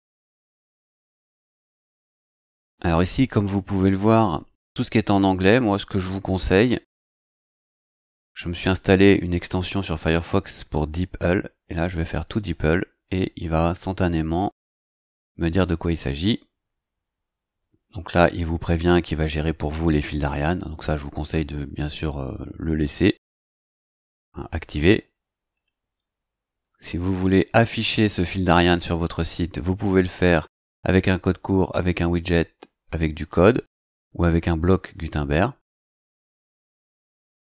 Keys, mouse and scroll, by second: 7.0-8.5 drag, 10.5 right click, 12.4 click, 22.1 click, 25.3 scroll down 2, 36.5 click.